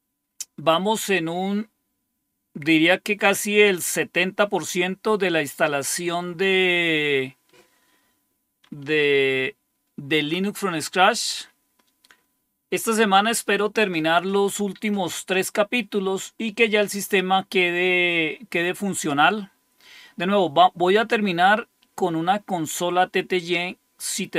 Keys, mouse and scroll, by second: 0.0 click.